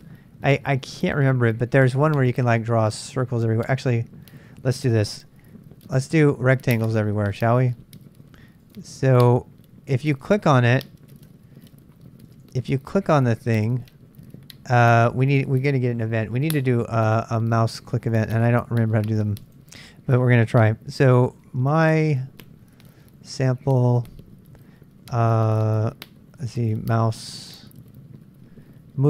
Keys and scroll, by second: 10.2 super+Tab, 11.3 super+Tab, 21.2-23.7 typing, 25.2 typing, 26.8-27.2 typing.